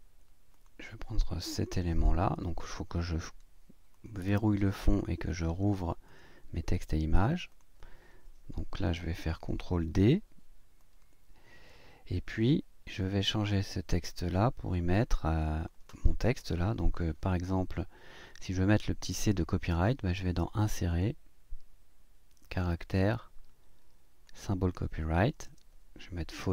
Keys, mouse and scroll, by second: 0.5 click, 1.5 click, 3.9 click, 5.2 click, 6.0 click, 7.5 click, 9.9 ctrl+d, 10.8-12.5 drag, 13.0 click, 14.9 click, 16.4 BackSpace, 20.2 click, 20.9 click, 24.2 click, 25.4 space.